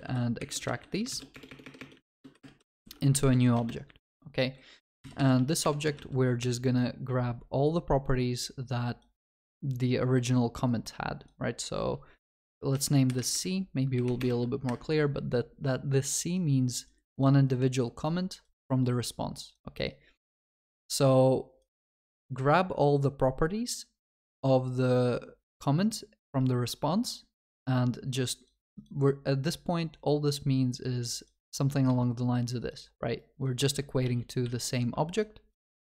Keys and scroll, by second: 13.1 Escape, 34.0 ctrl+z.